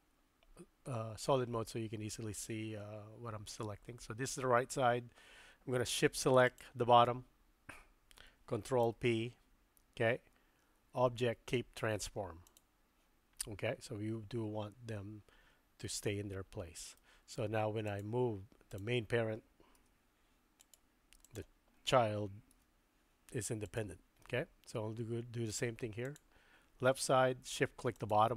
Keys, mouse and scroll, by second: 8.8 ctrl+p, 17.0 middle click, 17.9 click, 18.7 click, 19.8 g, 21.3 click, 22.5 r, 24.2-25.5 middle drag, 26.0 click.